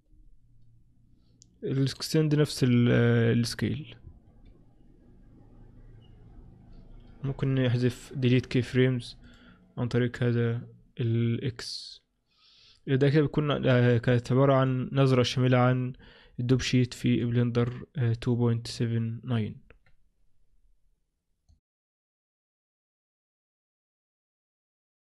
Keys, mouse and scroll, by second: 14.7 click, 16.1-17.0 scroll down 5, 17.3 click.